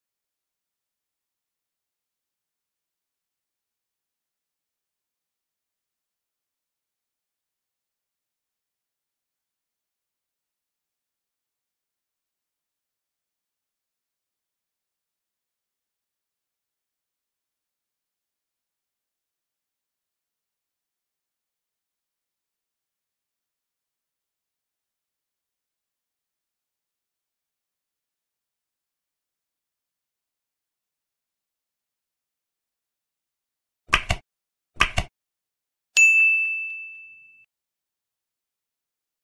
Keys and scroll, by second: 2.4 Up, 2.5 End, 3.4 space, 4.1 space, 5.1 ctrl+BackSpace, 6.4 ctrl+BackSpace, 8.0 Down, 9.4 ctrl+BackSpace, 10.3 End, 10.3 Left, 10.6 space, 11.4 ctrl+s, 11.5 Down, 14.6 Down, 14.7 ctrl+BackSpace, 17.6 space, 18.2 Down, 18.8 End, 18.9 space, 20.1 End, 20.2 space, 20.9 Down, 22.0 ctrl+Left, 23.3 ctrl+Right, 23.8 Right, 24.5 Right, 25.0 Up, 25.5 End, 27.0 End, 27.6 ctrl+s, 27.7 Up, 28.1 End, 28.6 space, 28.8 space, 29.8 space, 31.1 space, 31.2 space, 31.6 ctrl+e, 32.2 Down, 37.6 Right, 37.8 ctrl+shift+Left, 38.7 ctrl+s.